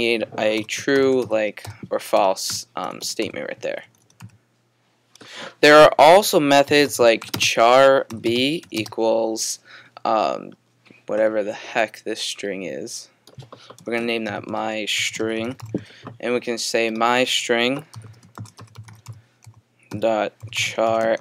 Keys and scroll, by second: 0.4-4.7 typing, 6.4-9.1 typing, 10.5 typing, 14.3-16.5 typing, 17.7-21.2 typing.